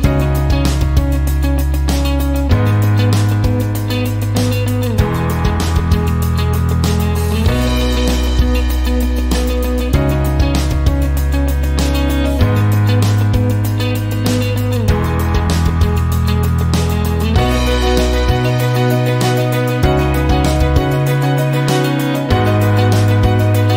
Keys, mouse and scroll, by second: 4.5 click, 5.9 click, 8.5 click, 10.0 click, 12.3 click, 14.1 click, 17.7 click, 19.1 click, 19.8 click, 22.6 click.